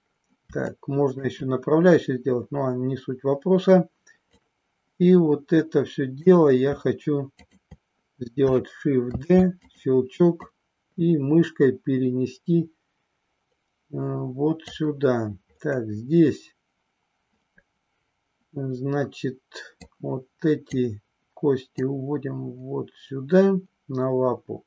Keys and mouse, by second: 0.6 shift+middle click, 4.4-6.3 drag, 9.2 shift+d, 9.6 click, 10.5-14.5 drag, 19.9 click, 21.8-24.6 drag.